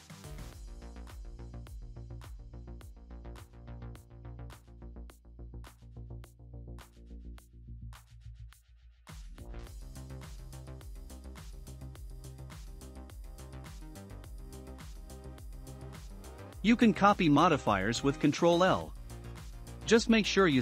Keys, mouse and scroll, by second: 0.0-2.9 drag, 5.0 scroll up 1, 5.6-6.9 drag, 7.4 shift+click, 7.8 shift+click, 8.3 shift+click, 8.9 shift+click, 9.8 shift+click, 10.6 shift+click, 12.0 shift+click, 14.0 ctrl+click, 15.0-15.8 scroll up 3, 15.8 shift+click, 15.8 scroll up 1, 16.4 scroll down 2, 17.6-20.0 shift+drag, 17.6 scroll down 2, 20.5 shift+middle click.